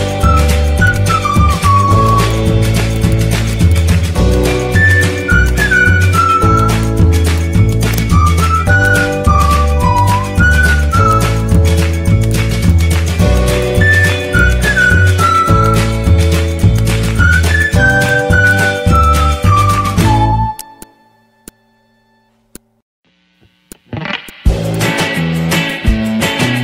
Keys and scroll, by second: 2.1 z, 14.2 z, 15.6 z, 25.6 z.